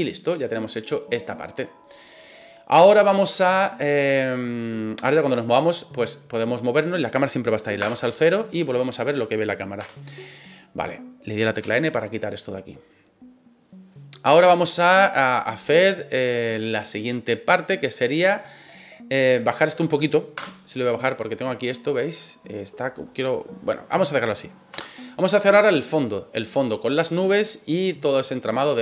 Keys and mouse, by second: 2.2 right click, 5.1-7.6 middle drag, 7.8 KP_0, 9.8 KP_0, 11.6 n, 14.4-16.2 middle drag, 20.4 KP_0, 21.3 right click, 24.7 KP_0, 25.4-25.8 middle drag.